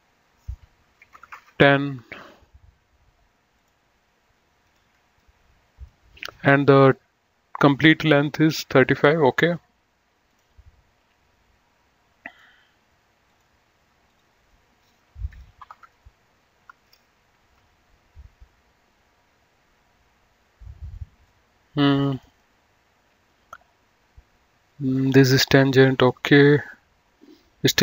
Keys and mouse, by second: 0.9 KP_1, 1.1 KP_0, 1.3 Return, 3.6 click, 10.3 click, 12.2 click, 15.4 KP_3, 15.7 Return, 17.5 Escape, 21.1 click, 24.6 click.